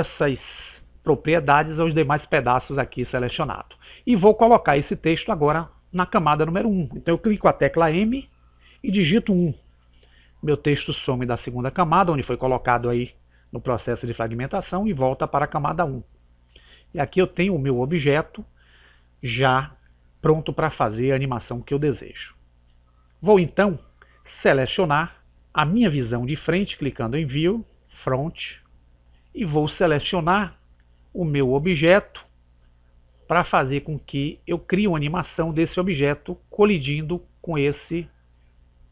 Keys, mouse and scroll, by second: 8.2 m, 16.4 click, 28.4 click, 29.0-30.6 middle drag, 30.2-32.0 right drag, 31.8 click, 38.3 click.